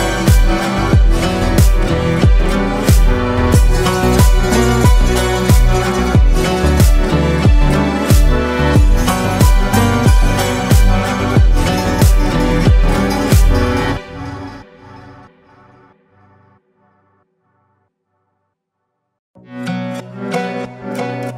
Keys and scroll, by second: 3.0 ctrl+space, 3.5 ctrl+space, 4.2 ctrl+space, 19.6 ctrl+space.